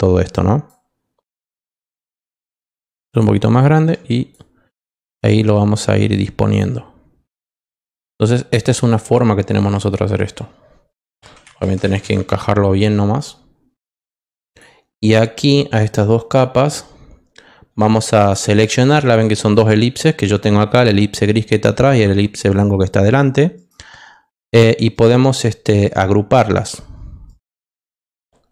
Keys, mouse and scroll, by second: 0.3 click, 2.4 shift+click, 3.7 shift+click, 4.6 click, 5.3 click, 6.1 click, 7.3 click, 8.2 click, 9.5 click, 14.4 click, 15.3 click, 18.8 ctrl+click, 23.5 right click, 24.3 right click, 24.9 right click, 27.2 right click.